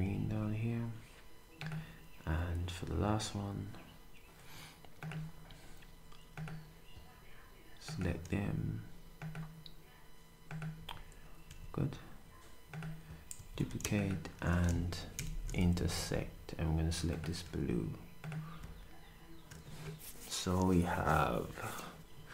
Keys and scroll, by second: 0.0 s, 10.8 d, 13.3 d, 15.1 8, 15.8 d, 17.4 s.